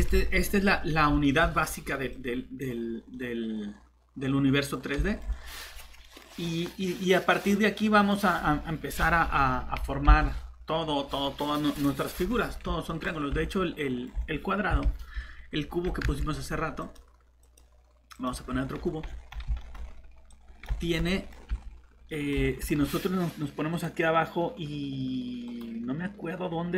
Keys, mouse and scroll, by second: 0.1 alt+Tab, 1.2 middle click, 2.1 click, 3.1 middle click, 4.7 scroll up 1, 5.1 middle click, 5.5 scroll down 1, 6.0 middle click, 6.3 scroll down 1, 8.0 middle click, 13.0 middle click, 13.1 scroll down 1, 13.3 shift+Tab, 13.5 middle click, 14.7 Delete, 16.0 ctrl+z, 16.8 click, 18.4 scroll down 1, 19.6 middle click, 20.3 click, 20.8 middle click, 21.5 shift+Tab, 23.7 right click.